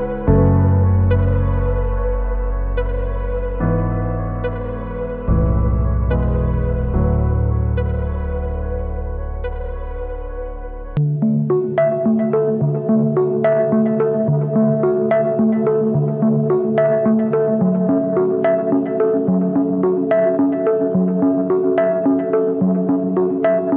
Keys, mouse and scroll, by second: 0.7 alt+shift+click, 3.7 alt+shift+click, 6.9 Return, 7.1 Left, 9.7 ctrl+t.